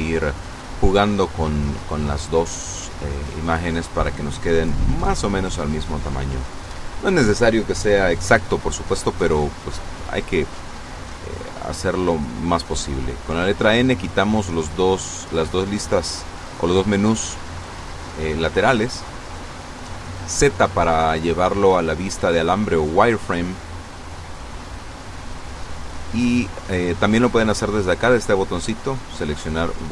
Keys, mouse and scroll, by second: 11.2 n, 12.0 n, 14.3-16.0 drag, 16.9-17.4 scroll up 2, 18.6 z, 19.7 z, 21.4 scroll down 2, 25.6 click, 28.1 click.